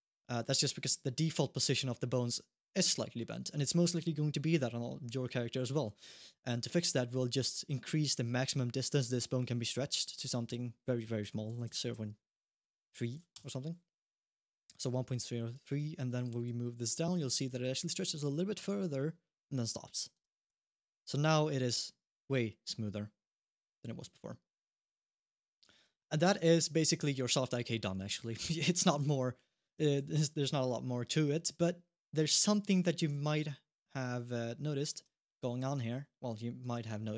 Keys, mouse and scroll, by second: 0.8 middle click, 1.5 middle click, 5.2 middle click, 6.6 click, 9.8 click, 15.3 click, 15.8 shift+middle click, 16.5 click, 16.9 g, 20.3 g, 25.9 scroll down 1, 26.3 alt+g, 26.7 middle click, 28.2 middle click, 28.8 g, 29.8 g, 32.5 alt+g, 35.0 middle click, 35.4 g.